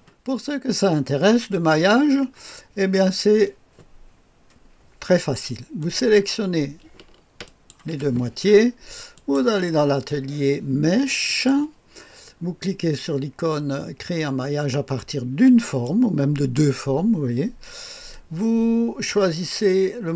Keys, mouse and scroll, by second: 0.0 click, 1.1-2.1 scroll up 2, 2.1-2.6 scroll down 2, 5.8 click, 7.5 ctrl+click, 9.1 click, 11.3 click, 15.5 click, 18.1-19.4 drag.